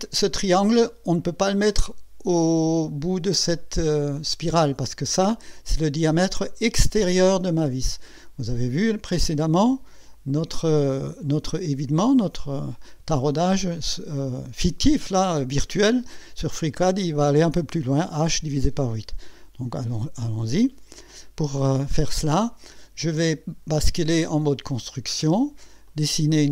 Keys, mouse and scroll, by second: 10.1 click, 20.9 click, 21.7 scroll up 1, 22.2-22.8 right drag, 24.4 click, 25.8 click.